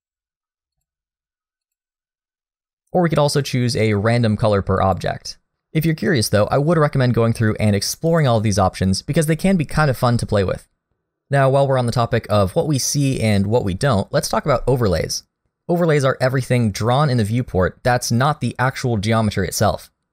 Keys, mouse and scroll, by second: 16.9-17.7 scroll down 1, 17.7-19.9 scroll down 1.